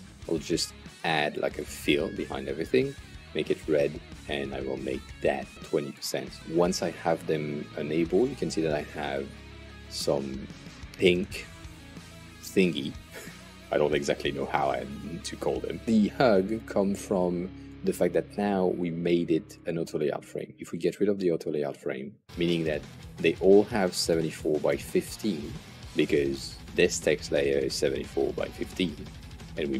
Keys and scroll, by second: 2.8-3.8 typing, 5.3-6.1 typing.